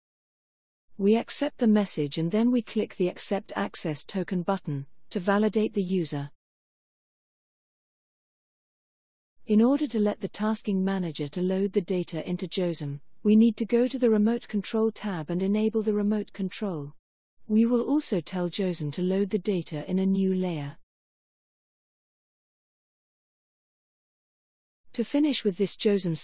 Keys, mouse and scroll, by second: 1.8 click, 4.7 click, 15.4 click, 18.0 click, 22.3 click.